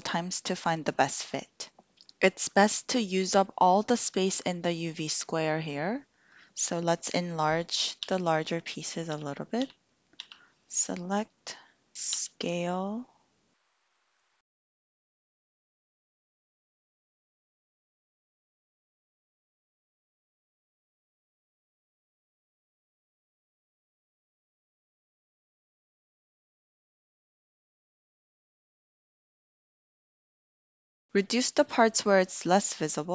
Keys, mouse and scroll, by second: 8.1 l, 12.3 s, 14.4 g, 15.1 click, 15.4 l, 15.8 g, 16.2 shift+click, 17.4 click, 17.6 shift+middle click, 18.0 l, 18.6 g, 18.7 x, 19.2 shift+click, 19.7 shift+click, 19.9 shift+middle click, 20.6 l, 20.6 g, 21.5 click, 21.8 click, 22.0 shift+l, 22.0 shift+middle click, 22.3 g, 23.2 click, 23.3 shift+click, 23.6 click, 23.8-25.1 typing, 24.4 click, 25.5 click, 25.6 shift+click, 25.9 shift+click, 26.1 shift+click, 26.5 drag, 27.1 s, 28.4 g, 29.0 click, 29.1 click, 29.2 shift+click, 30.2 shift+click, 30.6 shift+click.